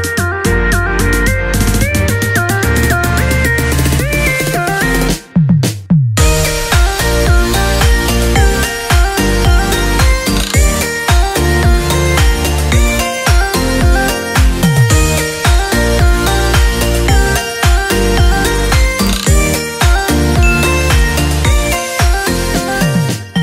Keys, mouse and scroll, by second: 3.4-14.6 drag, 19.9-23.4 drag.